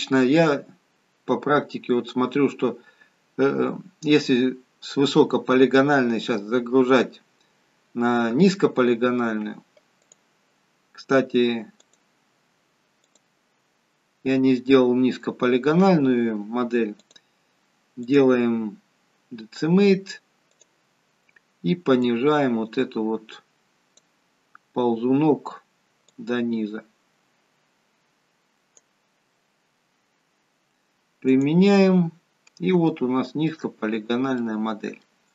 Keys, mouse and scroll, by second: 10.1 click, 11.8 click, 13.1 click, 14.0-14.6 scroll up 4, 14.7-15.3 scroll down 1, 15.3-16.1 scroll down 1, 17.0 click, 18.1 click, 22.0 click, 26.1 click, 31.2 click, 32.9 shift+middle click, 33.7-34.2 scroll up 4, 35.2 middle click, 35.2-35.3 scroll down 2.